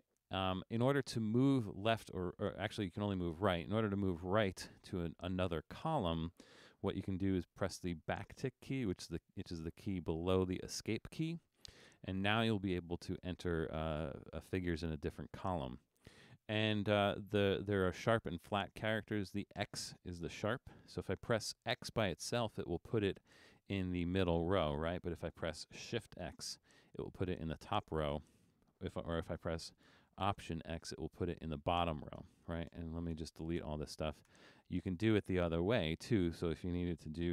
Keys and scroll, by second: 10.7 `, 22.5 x, 25.0 BackSpace, 26.6 shift+x, 28.2 BackSpace, 30.6 alt+x, 32.3-34.3 typing.